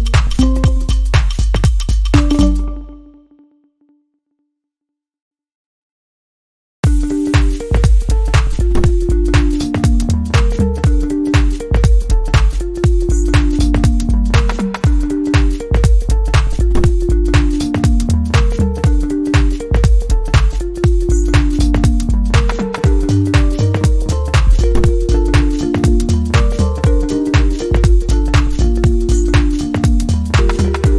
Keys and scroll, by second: 21.1 scroll down 1, 21.2-21.6 scroll up 1, 22.7 scroll down 1, 22.8 scroll up 1, 23.3-23.6 scroll down 1, 25.1-25.4 scroll down 1, 29.3-29.7 scroll down 1, 29.9 scroll down 1, 30.0 scroll up 1, 30.7 scroll up 1, 30.9 scroll down 1.